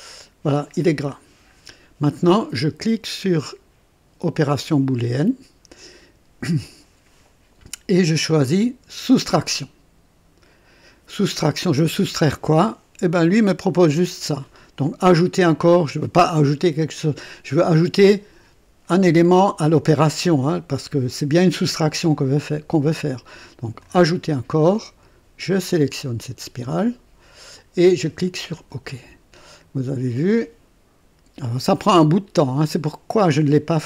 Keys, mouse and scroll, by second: 4.4 click, 8.2 click, 9.0 click, 23.7 click, 25.4 click, 28.5 click.